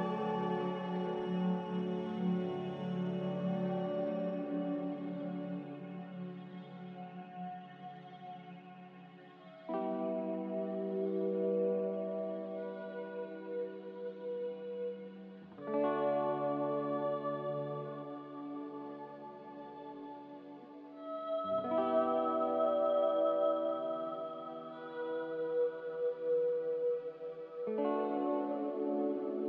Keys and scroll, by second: 3.8 g, 18.4-20.0 typing, 20.3 Return, 26.5 g, 26.5 a.